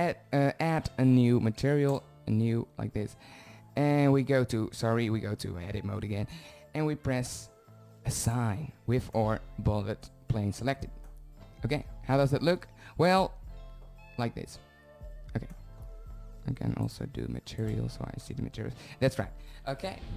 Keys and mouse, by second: 5.8-9.5 middle drag, 6.2 Tab, 10.0-12.8 drag, 13.8 shift+z, 16.9 z.